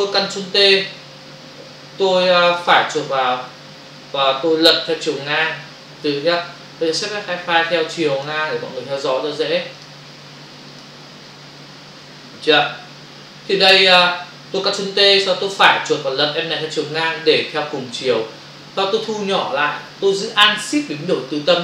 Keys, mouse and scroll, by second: 2.6 right click, 8.2 click, 9.7 click, 15.5 right click, 16.9 click, 19.1 ctrl+-.